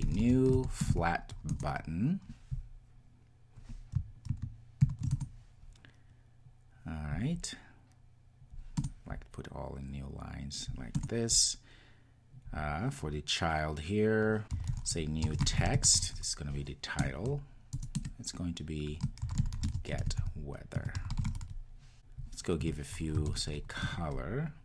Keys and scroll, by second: 0.7 Return, 4.8 ctrl+alt+shift+super+l, 17.0 Return, 23.8 Return.